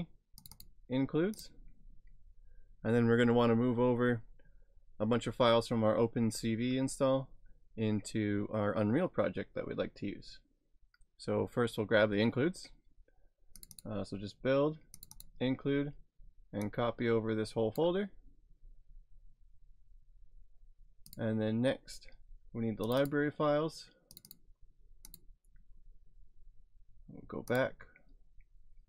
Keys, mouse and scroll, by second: 0.4 click, 0.6 double click, 1.4 click, 13.6 click, 16.6 click, 16.7 click, 21.1 click, 22.8 click, 27.5 click.